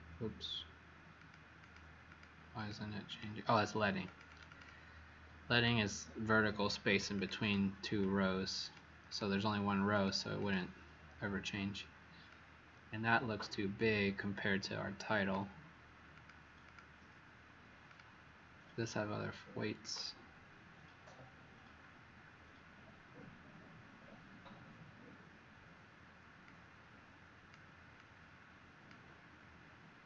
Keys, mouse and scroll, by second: 1.1 click, 1.5 click, 2.0 click, 2.5 click, 3.0 click, 4.0 click, 4.2 click, 4.5 click, 4.6 click, 7.1 click, 10.3 click, 12.2-13.6 click, 13.7 click, 16.1 click, 16.6 click, 17.8 click, 18.1 click, 18.7 click.